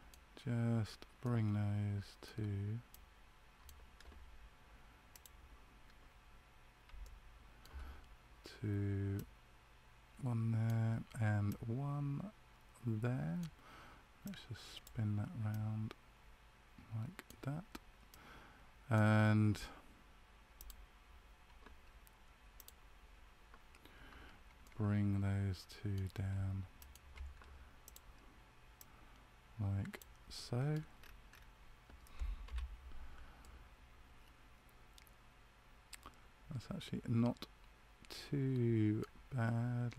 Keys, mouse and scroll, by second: 1.1 middle click, 2.8 right click, 5.0 click, 7.0 shift+middle click, 9.1 right click, 14.2 click, 15.4 right click, 20.5 click, 24.6 middle click, 26.7 shift+right click, 27.8 click, 30.3 middle click, 30.9-32.0 scroll up 6, 32.4 KP_Decimal, 33.3 middle click.